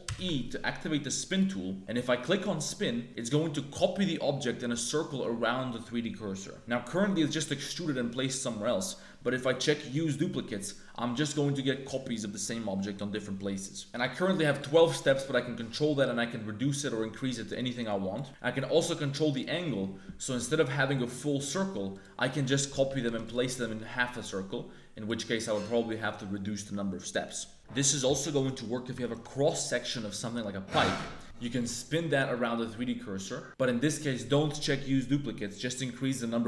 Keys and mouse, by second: 0.0 alt+e, 9.8 click, 14.8-18.1 drag, 18.6-21.3 drag, 21.9-23.2 drag, 24.3 click, 28.6 click, 29.0 alt+click, 31.2 alt+e, 35.6-36.4 drag.